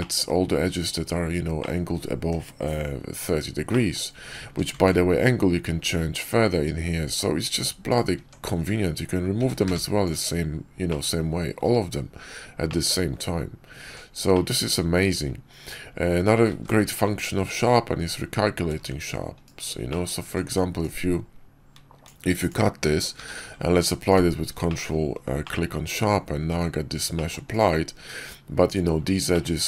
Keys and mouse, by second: 1.5 click, 3.6 click, 4.3 Tab, 4.7 ctrl+`, 8.1 Tab, 9.3 a, 9.5 q, 10.8 middle click, 12.6 middle click, 13.7 Tab, 14.2 click, 16.4 ctrl+`, 19.8 middle click, 20.1 Tab, 20.7-22.4 drag, 23.1 q, 24.6 middle drag, 25.3 drag, 25.9 Tab, 26.4 Tab, 29.2 click.